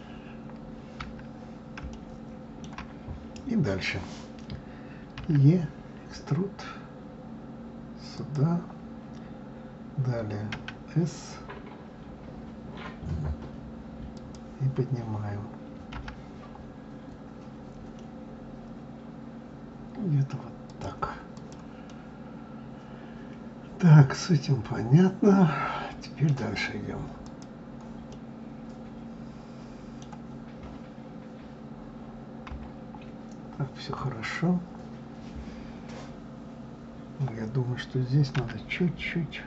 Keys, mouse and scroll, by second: 2.2-5.2 shift+middle drag, 21.6 click, 22.1-25.2 middle drag, 27.5 click, 28.3-31.4 middle drag, 32.7 KP_3.